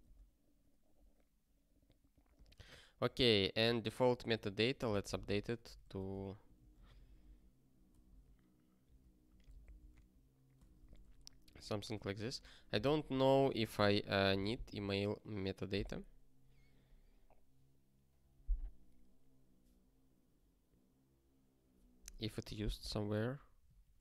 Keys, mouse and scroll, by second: 0.0 click, 1.0 click, 3.0 ctrl+b, 3.6 alt+b, 4.1 alt+d, 4.3 alt+d, 4.4-6.6 typing, 6.8 alt+b, 7.0 alt+b, 7.9 alt+d, 8.1 alt+d, 9.1-12.3 typing, 13.1 ctrl+a, 13.6 ctrl+alt+@, 13.8 alt+;, 14.8 ctrl+s.